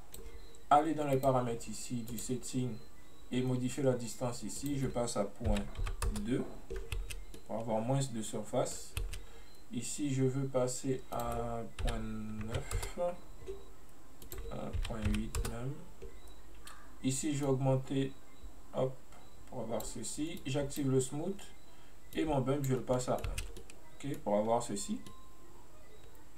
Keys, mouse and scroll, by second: 0.0-1.3 drag, 2.1-7.0 drag, 7.0 space, 7.2 scroll down 1, 7.4-9.1 middle drag, 9.1 space, 11.2-14.2 drag, 14.3-17.3 drag, 17.6-23.0 drag, 23.0 middle click, 23.4 space, 23.6-24.6 middle drag, 24.6-25.2 scroll up 1, 25.2-26.3 middle drag.